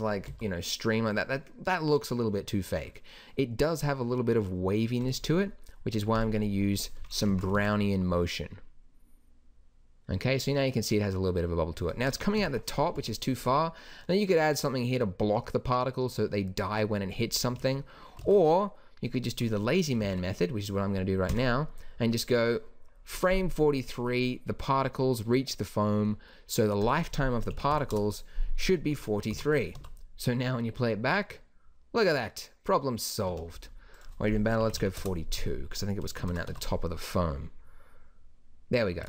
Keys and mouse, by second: 0.3 alt+a, 5.0-7.3 drag, 7.3 shift+Left, 7.5 alt+a, 12.4 KP_1, 17.4 Escape, 18.2 alt+a, 20.6 alt+a, 21.3 Right, 26.8-29.3 drag, 29.3 shift+Left, 29.7 alt+a, 33.4 Escape, 36.2 shift+Left, 36.5 alt+a.